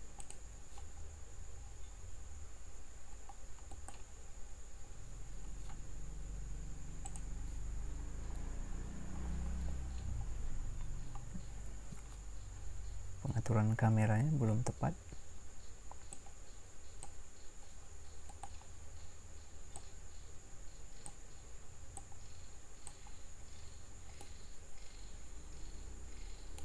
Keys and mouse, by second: 0.2-3.7 drag, 3.7-5.6 middle drag, 18.2-19.7 right drag, 24.8-26.3 middle drag.